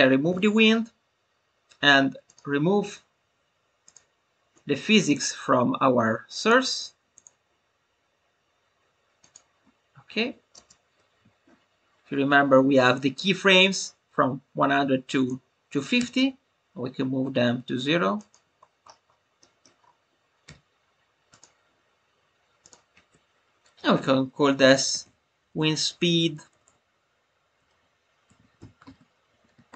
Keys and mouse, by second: 5.1-6.5 drag, 6.6 click, 7.1 click, 9.1 click, 10.8 space, 11.1 a, 13.7-15.3 drag, 18.1 click, 19.5-20.5 middle drag, 21.3 click, 22.7-29.7 drag.